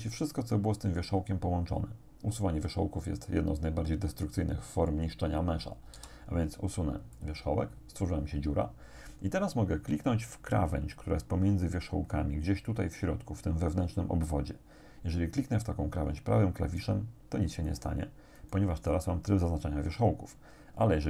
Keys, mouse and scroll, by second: 6.0 x, 7.2 click, 16.6 right click, 17.7 right click, 18.4 right click.